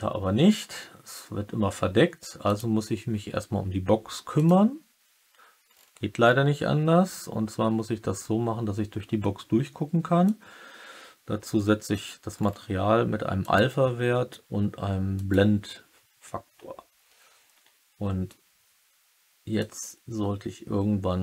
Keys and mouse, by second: 4.3 click, 4.3 typing, 10.3-12.0 drag, 13.3-15.2 drag, 19.6-21.2 drag.